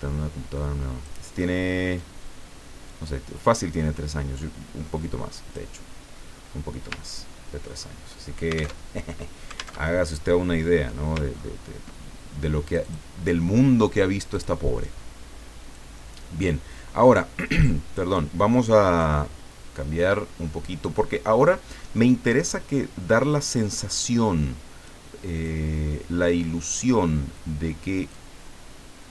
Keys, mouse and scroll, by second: 1.9-5.7 drag, 7.1-7.6 ctrl+scroll down 2, 7.8-8.8 ctrl+drag, 8.9 alt+Tab, 9.8 alt+Tab, 11.3-12.1 ctrl+scroll up 2, 12.6 click, 14.3 click, 15.7-18.1 drag, 19.0-21.0 drag, 21.2 middle click, 23.5-25.1 drag, 25.4-26.9 drag, 28.1-29.1 drag.